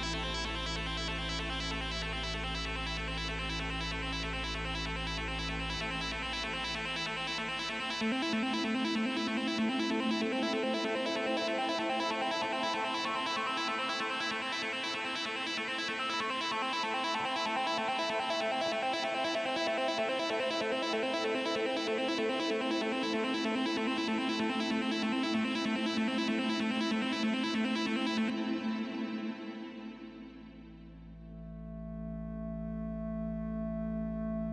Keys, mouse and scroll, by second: 7.8-8.9 typing, 12.5 BackSpace, 13.0 Return.